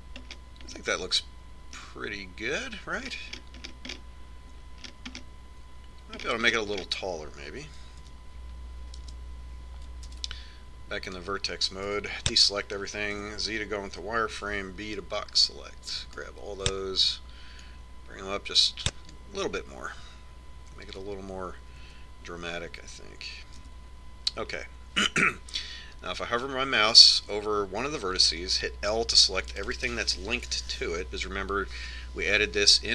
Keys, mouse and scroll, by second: 0.3 middle click, 1.1 middle click, 2.4-3.5 middle drag, 3.5-4.8 scroll up 3, 4.1 middle click, 4.2 middle click, 4.8-9.1 middle drag, 9.1 Tab, 10.1 KP_1, 11.1 ctrl+Tab, 13.0 a, 14.3 z, 15.9 b, 18.8-20.6 drag, 22.1 Tab, 23.0 Tab, 24.8 z, 30.1 l.